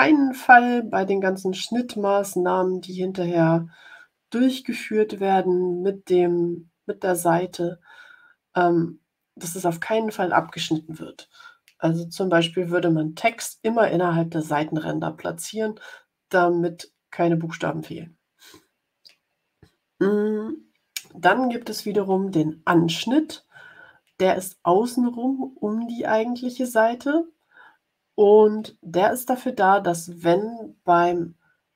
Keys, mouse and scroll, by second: 13.2 click.